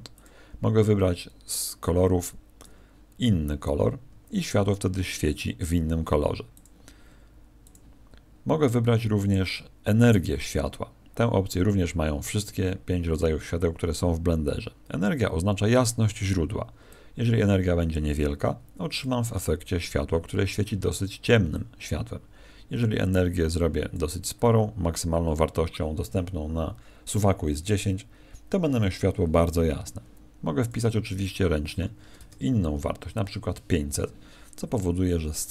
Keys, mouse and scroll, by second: 0.1 click.